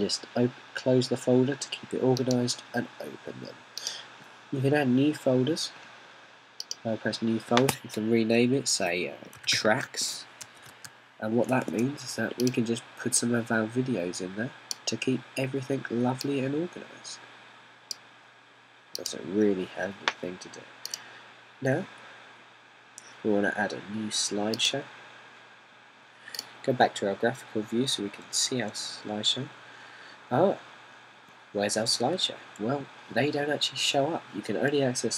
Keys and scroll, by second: 10.4-12.3 typing.